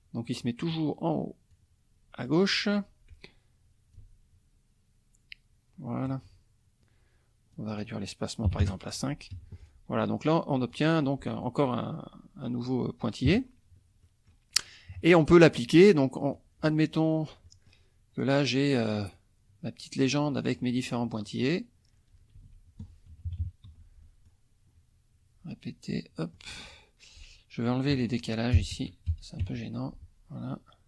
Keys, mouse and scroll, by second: 0.4 click, 1.5-2.8 drag, 4.0-6.2 ctrl+drag, 7.5 click, 8.4 KP_5, 8.6 KP_Enter, 9.3 F1, 9.6 click, 10.7 click, 13.2 KP_Subtract, 14.0-16.3 middle drag, 14.9 KP_Subtract, 16.3-17.9 drag, 19.1-20.3 drag, 20.3 middle click, 20.4 click, 21.2 click, 22.3 ctrl+z, 23.1 KP_Subtract, 23.7 F2, 24.0 click, 26.2 click, 27.9 click, 28.5 KP_0, 28.7 Tab, 29.1 KP_0, 29.4 Tab.